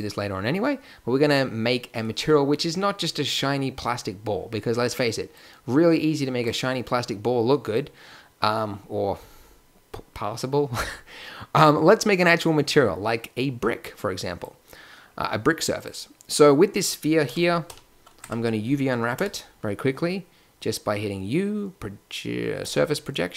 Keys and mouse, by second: 0.5-5.3 middle drag, 7.2-7.7 middle drag, 9.6-15.7 middle drag, 17.2 KP_1, 17.7 KP_5, 18.2 Tab, 19.1 u.